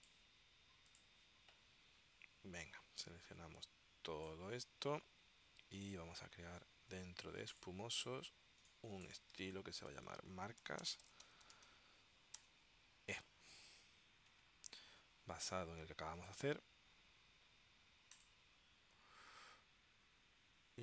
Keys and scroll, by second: 9.8-13.3 typing, 14.4 shift+e.